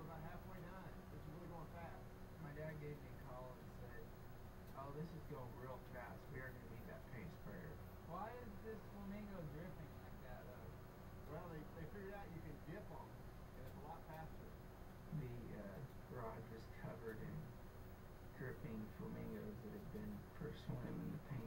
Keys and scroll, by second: 1.1 ], 1.7 ], 3.3 ].